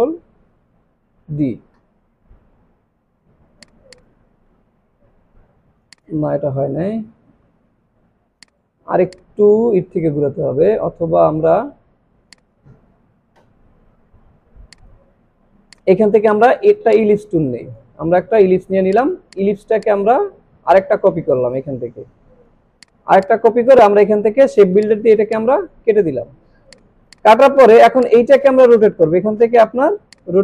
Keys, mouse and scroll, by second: 0.5 ctrl+d, 3.7 click, 4.9 alt+scroll down 1, 5.3 alt+scroll up 1, 5.8 space, 5.9 click, 6.5 ctrl+z, 8.1 alt+scroll down 1, 8.3 space, 8.4-9.7 drag, 12.3 click, 14.8 right click, 15.7-16.7 click, 16.9-17.9 shift+drag, 19.9-22.7 alt+drag, 22.8 click, 25.3-25.9 alt+drag, 27.3 space, 27.4 click.